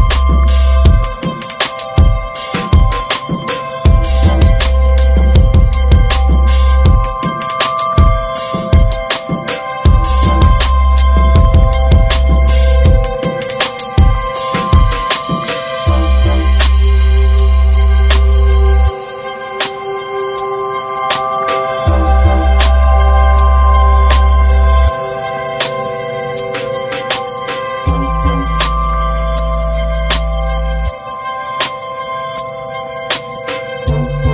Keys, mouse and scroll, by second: 1.3 Delete, 1.6 scroll down 3, 2.2 scroll down 4, 2.6 shift+middle drag, 2.8 scroll up 5, 3.6 click, 4.0 click, 4.6 h, 4.9 scroll down 2, 5.5 click, 5.7 h, 6.3 click, 6.9-7.2 shift+middle drag, 7.2 shift+click, 7.4-7.9 middle drag, 7.9 shift+click, 8.3 shift+click, 8.7 middle click, 8.9 ctrl+j, 9.2 ctrl+a, 10.1 h, 11.0 click, 11.1 scroll up 4, 11.4-12.6 shift+middle drag, 12.6-14.5 drag, 15.4 g, 16.7 click, 16.8 Delete, 17.1-17.5 scroll down 3, 17.5 shift+middle drag, 17.7 scroll up 2, 18.5 click, 18.7 scroll up 1, 19.9-21.9 drag, 22.8 Delete, 23.2 click, 23.6 h, 25.3 alt+h, 25.7-26.3 scroll down 12, 26.1 click, 26.4 middle click, 26.6 scroll up 1, 26.7-27.1 shift+middle drag, 27.1 scroll up 1, 27.2 ctrl+s, 27.4-27.9 shift+middle drag, 27.9 scroll up 3, 28.2-29.3 shift+middle drag, 29.3 scroll down 1, 29.5-31.0 middle drag, 31.0-31.8 scroll down 2, 32.6-33.2 drag, 33.2-33.6 scroll up 1, 33.6-34.3 shift+middle drag.